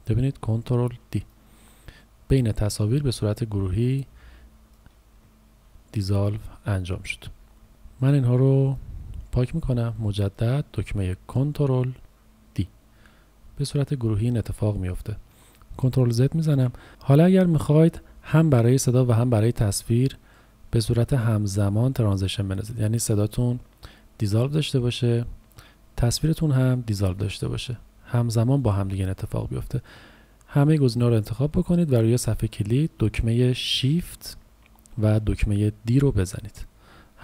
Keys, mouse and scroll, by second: 1.2 click, 5.6 ctrl+z, 6.4-7.5 typing, 7.7 Delete, 8.1 click, 8.3 Delete, 8.7 click, 9.0 Delete, 10.0 click, 12.6 ctrl+d, 16.4 ctrl+z, 17.7 click, 36.3 shift+d.